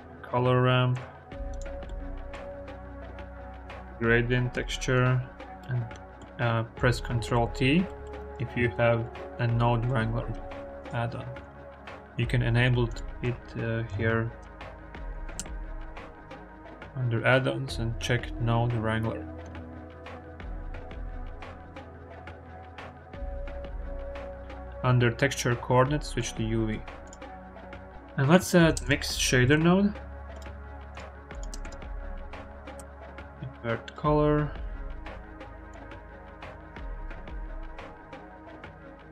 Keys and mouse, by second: 1.8 click, 2.5 shift+a, 5.6 click, 7.3 ctrl+t, 7.8 click, 8.1 click, 8.6 drag, 9.2 click, 10.7-11.4 drag, 19.7-20.4 drag, 20.8 click, 21.4 click, 22.2 click, 22.4 x, 23.6 click, 24.1 click, 26.3 click, 26.9 click, 28.1 click, 28.6 shift+a, 31.1 click, 31.4 shift+a, 35.5 click, 38.4-39.0 drag.